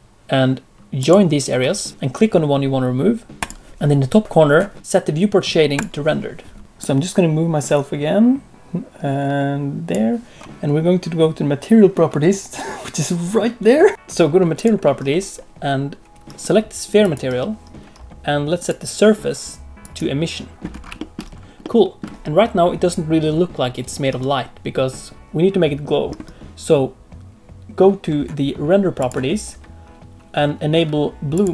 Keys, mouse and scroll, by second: 3.7 shift+middle click, 3.7 scroll down 2, 5.8 click, 14.5 click, 17.0 click, 18.5 click, 20.7 scroll up 2, 20.9 shift+middle click, 21.3 scroll down 1, 21.6 middle click, 26.4 click, 28.9 click, 31.3 click.